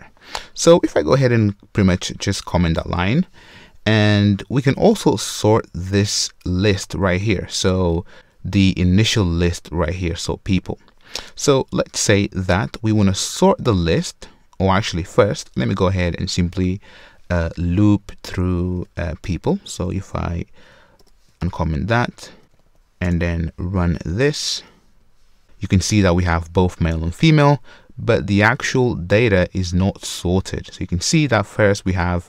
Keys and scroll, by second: 2.5 super+/, 18.7 super+c, 19.7 super+v, 21.0 super+v, 22.0 super+/, 22.3 super+z, 22.4 Return, 25.1 shift+F10.